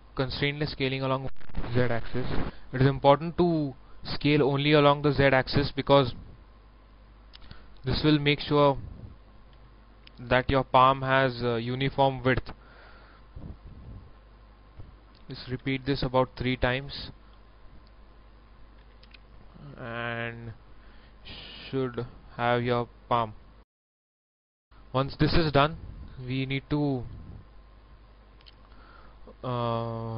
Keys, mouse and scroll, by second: 1.5-4.1 drag, 4.2 shift+middle click, 7.2 s, 7.8-8.8 drag, 9.5 e, 11.3 click, 13.4 s, 13.7 z, 18.8 s, 19.0 z, 20.4 click, 20.4 click, 22.7 middle click, 23.9-26.2 shift+middle drag, 26.3 shift+middle click, 27.3 scroll up 1, 27.8-28.9 middle drag.